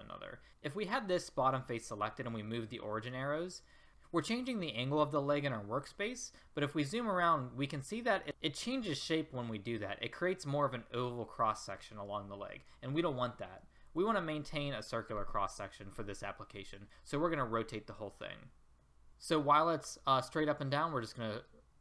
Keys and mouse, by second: 6.6-8.1 middle drag, 13.7 ctrl+z.